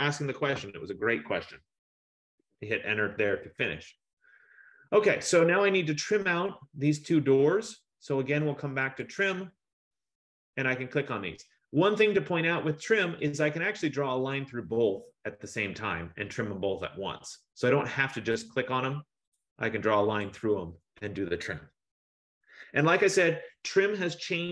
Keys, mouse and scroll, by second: 2.5 Return, 4.1-5.3 scroll, 5.3-6.6 scroll, 6.6-7.5 scroll, 9.1 click, 13.4 click, 15.9 click, 19.5 click, 20.3 F15, 20.3 click.